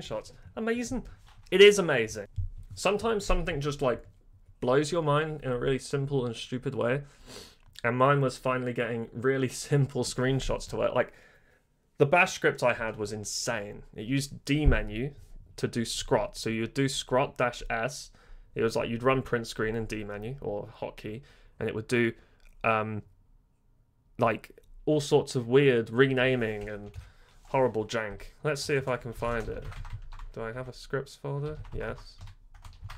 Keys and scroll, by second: 2.0-2.7 typing, 26.9 super+Left, 28.1-32.9 typing, 28.6 Return, 28.7 Return, 31.5 Tab, 31.7 Tab.